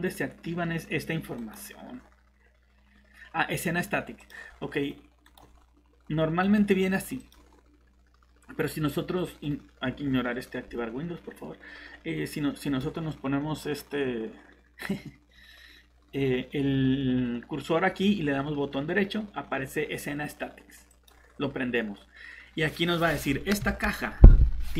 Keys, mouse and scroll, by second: 4.2 click, 5.2 right click, 7.2 click, 12.6 right click, 20.9 click.